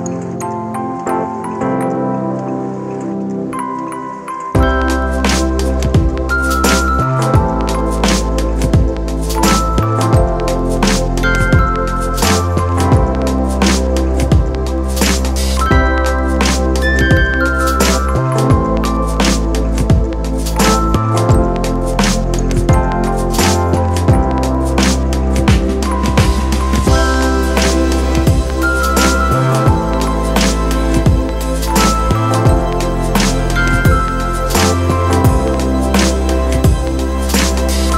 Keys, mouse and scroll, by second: 0.9 alt+shift+click, 8.5 right click, 16.7 alt+shift+click, 25.9 ctrl+click, 28.9 ctrl+d.